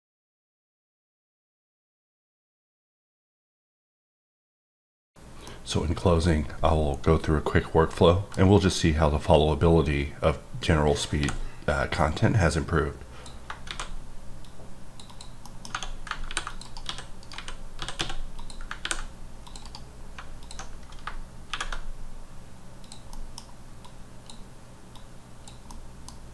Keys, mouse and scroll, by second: 11.2 x, 11.8 click, 13.6 shift+a, 14.4 click, 15.0 double click, 15.4 middle click, 15.9 scroll, 16.2 ctrl+r, 16.5 ctrl+click, 16.6 right click, 16.8-17.9 typing, 17.2 right click, 18.3 click, 18.8 ctrl+r, 18.9-19.4 ctrl+scroll up 2, 19.4 click, 19.6 right click, 19.9-20.4 scroll up 2, 20.4 alt+click, 20.7-21.5 scroll down 3, 22.4-22.8 scroll down 1, 22.8 click, 23.1 middle click, 23.8 click, 25.2 click, 25.7 middle click.